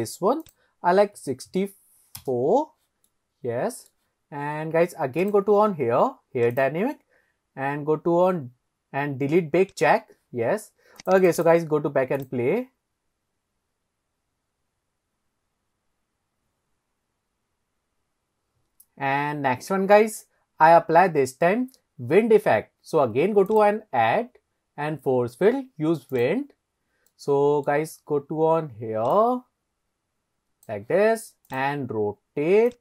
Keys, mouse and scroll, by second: 0.5-2.4 drag, 3.1-3.9 middle drag, 5.2 click, 6.6 click, 7.0-7.8 scroll down 3, 9.7 click, 11.0 click, 12.2 click, 23.5-26.4 drag, 27.1-27.7 middle drag, 27.1-27.5 scroll down 3, 29.2 click, 29.5 middle click, 31.5 click, 32.7 click.